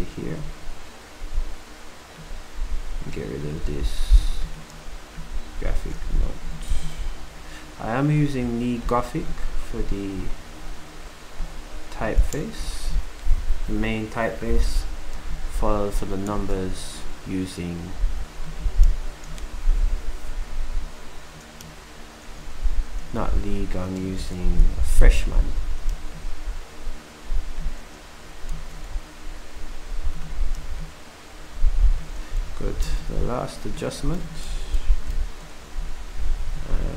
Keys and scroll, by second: 24.4 ctrl+alt+shift+Down, 28.5 c, 30.6 typing, 32.5 typing, 32.8 ctrl+c, 34.1-34.6 typing, 34.6 ctrl+alt+Up, 35.8 v.